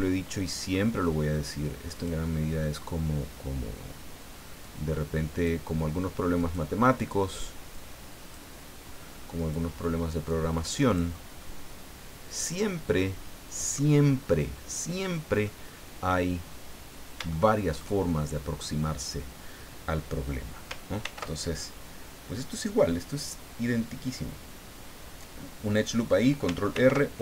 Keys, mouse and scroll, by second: 1.9 click, 4.6 click, 6.4 right click, 7.7 click, 9.4 right click, 10.3 click, 11.1 scroll down 1, 11.4-13.9 middle drag, 15.4 middle click, 17.3 shift+middle click, 21.0 ctrl+r, 23.1 click, 25.7 click, 26.7 ctrl+r, 27.1 ctrl+click.